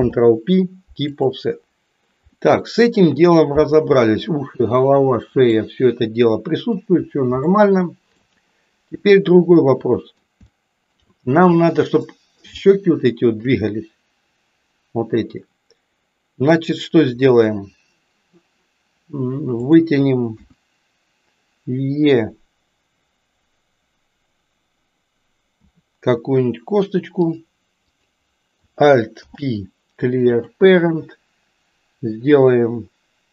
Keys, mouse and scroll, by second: 0.0 ctrl+p, 2.3-3.3 middle drag, 5.3-6.9 middle drag, 7.5 shift+middle click, 9.1-10.2 middle drag, 10.5 shift+middle click, 12.0 middle click, 12.7 shift+middle click, 19.6 click, 20.5 KP_1, 25.6 e, 27.8 click, 29.1 alt+p.